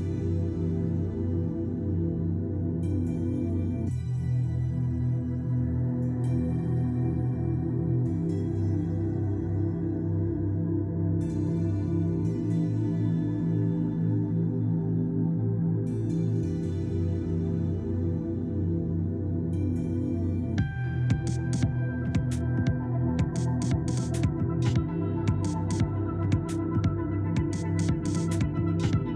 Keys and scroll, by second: 13.7 Escape.